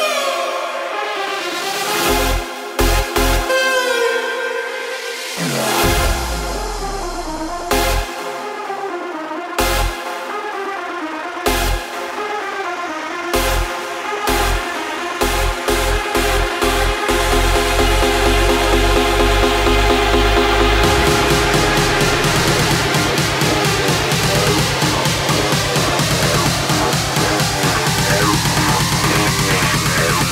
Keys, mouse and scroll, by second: 0.2 shift+click, 1.4 click, 8.3-9.3 drag, 10.5 click, 11.4 click, 13.4 click, 14.2 click, 16.6 space, 19.2 space, 20.2-23.7 drag, 23.7 space, 25.9 space, 27.3-29.3 drag, 29.3 space.